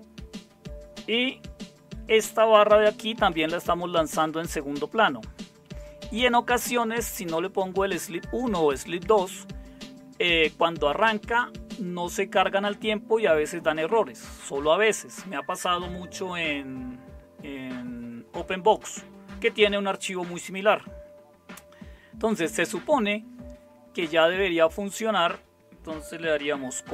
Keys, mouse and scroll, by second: 1.1 typing, 2.9-5.6 typing, 26.8 ctrl+o.